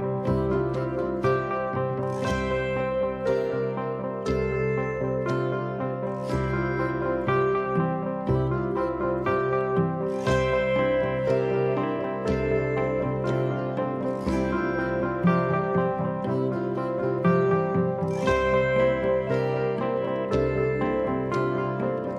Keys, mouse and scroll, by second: 8.3 click.